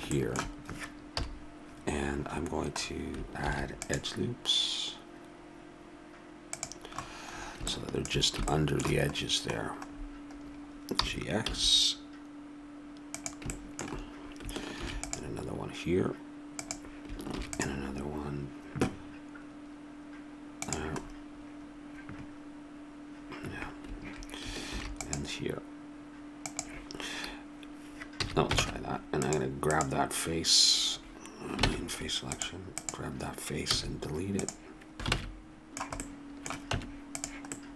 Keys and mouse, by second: 1.1 KP_7, 3.4 ctrl+r, 10.9 g, 14.8 ctrl+r, 17.3 ctrl+r, 24.7 ctrl+r, 28.2 a, 28.6 ctrl+Tab, 29.7-31.5 drag, 31.7 ctrl+Tab, 32.8-34.8 drag, 33.7 x, 35.1 ctrl+Tab, 36.1 z, 36.7 Tab.